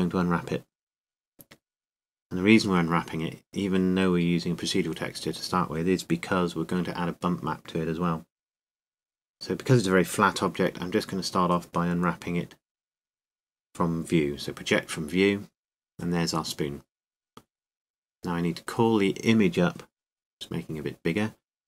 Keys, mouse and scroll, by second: 1.7-6.3 drag, 6.3 middle click, 8.8-9.9 middle drag, 20.6 s.